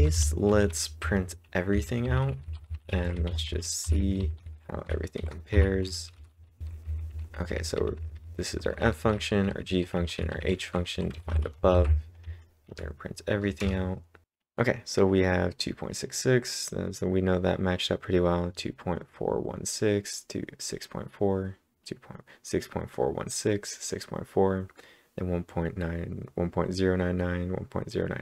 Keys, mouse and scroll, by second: 2.1-7.8 typing, 9.9-11.7 typing, 12.6 Up, 13.5 Return, 14.2-14.6 scroll down 2, 14.6-15.9 scroll down 1.